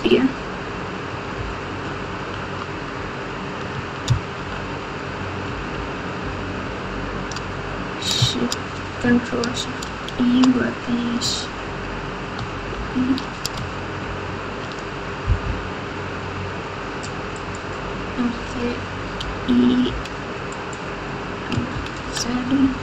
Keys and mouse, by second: 1.3-2.2 ctrl+KP_6, 4.3 ctrl+z, 5.7 ctrl+z, 6.2 ctrl+z, 6.6 ctrl+z, 9.8 ctrl+shift+e, 12.7 ctrl+shift+e, 14.0 shift+e, 19.2 e, 22.0 ctrl+z.